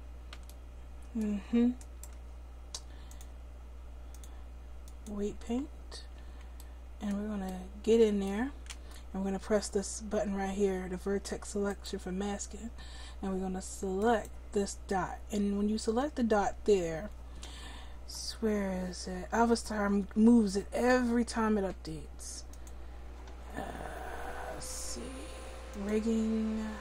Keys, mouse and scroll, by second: 11.7-26.8 drag.